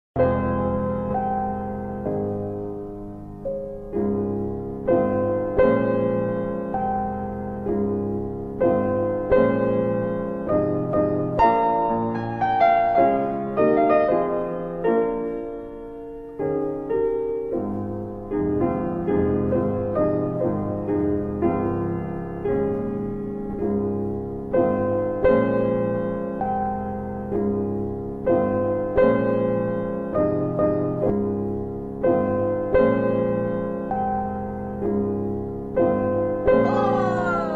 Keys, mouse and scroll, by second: 1.0 right click, 3.4 middle click, 3.5-4.1 scroll up 3, 4.4 middle click, 4.4-4.7 scroll up 1, 5.7 click, 6.9 alt+F4, 8.3 F3, 9.0 scroll up 1, 9.1 middle click, 9.8 middle click, 10.8 click, 12.2 r, 13.8 click, 16.3-17.3 typing, 18.2 click, 24.3 alt+w, 25.5 typing, 26.0 alt+w, 26.8 alt+w, 27.4 alt+middle click, 28.3 middle click, 28.3-29.1 scroll up 1, 32.8 click, 37.2 ctrl+click.